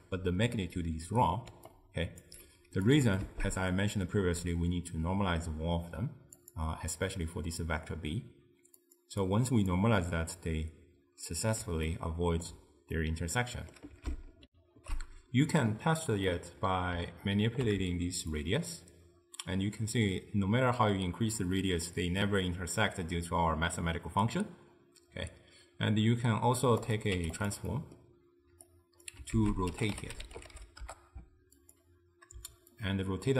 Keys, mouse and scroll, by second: 1.6 d, 1.7-2.3 right drag, 2.3 d, 2.6 d, 2.9 click, 3.3 shift+d, 8.9 click, 9.3 drag, 10.4-14.5 middle drag, 14.5 ctrl+alt+shift+w, 16.3-18.4 middle drag, 18.4-21.5 shift+drag, 27.0 click, 27.8 middle click, 28.7 click, 29.4 ctrl+a, 32.8-33.3 shift+drag.